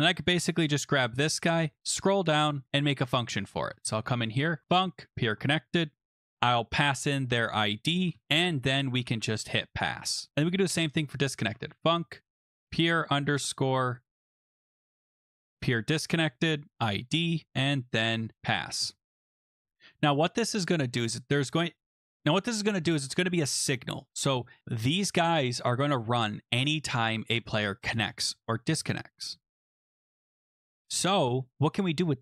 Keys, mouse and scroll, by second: 0.4 ctrl+c, 1.6 scroll down 4, 2.6 click, 3.7 Return, 3.7 scroll, 3.8 Return, 4.2-9.6 typing, 10.3 click, 11.1-19.5 typing, 20.8 Return, 22.9 Return, 23.3 Return, 23.3 scroll, 25.8 click, 29.2 click.